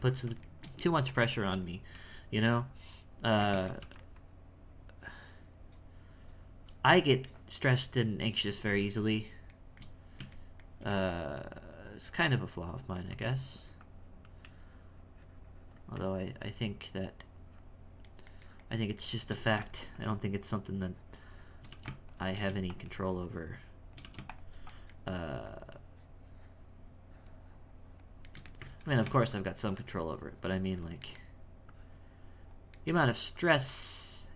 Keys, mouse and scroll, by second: 0.8 f, 1.3 f, 2.4-3.5 drag, 3.5 ctrl+2, 4.1-8.0 drag, 8.3-9.6 shift+drag, 9.6-10.9 shift+middle drag, 10.9-11.9 space, 13.1-18.0 drag, 18.0-19.4 shift+middle drag, 19.4 e, 19.9-21.7 shift+drag, 21.7 e, 22.7-24.0 shift+drag, 24.7 shift+middle click, 25.5-28.3 shift+drag, 28.3 shift+middle click, 28.7 ctrl+z, 29.3-31.1 shift+drag, 31.1 shift+middle click, 31.7-32.8 shift+drag, 32.8 shift+middle click, 33.4-34.3 shift+drag.